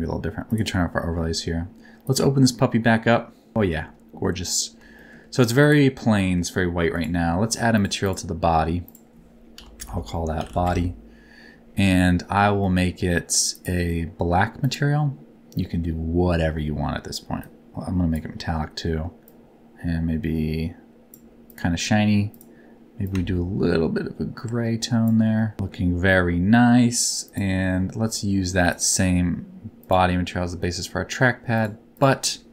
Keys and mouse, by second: 0.4 click, 2.0-3.5 drag, 3.6 shift+middle click, 5.0 shift+middle click, 5.6 click, 6.1 middle click, 6.9 click, 8.0 click, 8.9-10.6 drag, 12.6 middle click, 14.6 click, 15.6 middle click, 17.4 click, 19.2-21.1 drag, 22.3 click, 25.4 middle click, 28.6-29.9 drag, 32.0-32.5 drag.